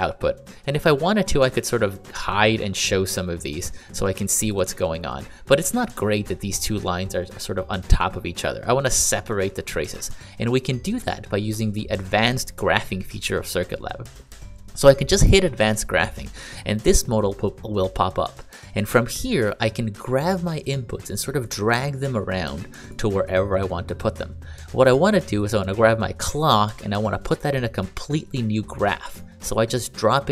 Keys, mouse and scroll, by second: 3.0 click, 3.5 click, 10.5 click, 20.4 click, 22.2 click, 26.4 click.